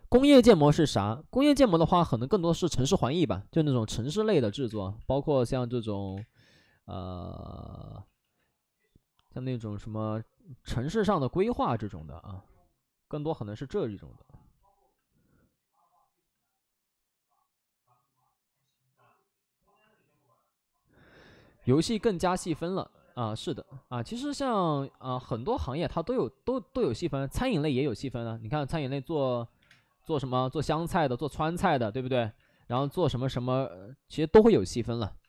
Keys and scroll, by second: 4.6 space, 5.8 x, 6.0 space, 7.9 ctrl+z, 7.9 1, 8.1 ctrl+z, 10.8 space, 11.5 space, 12.2 space, 29.2 alt+s, 29.5 3, 29.6 space, 31.7 alt+s, 32.2 1, 32.6 1, 32.6 space, 35.1 space.